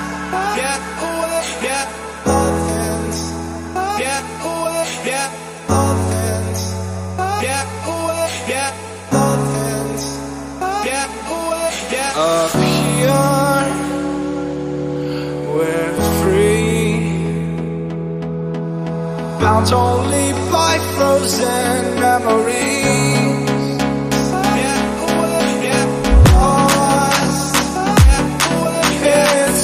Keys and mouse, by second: 1.8-11.8 drag, 14.8-23.4 drag, 23.4 g, 26.0-29.4 drag.